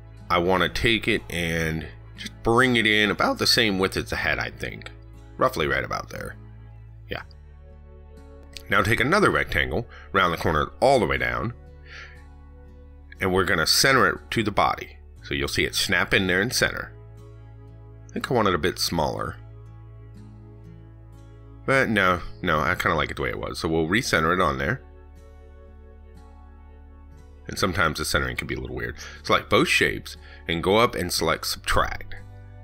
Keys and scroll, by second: 23.6 ctrl+z.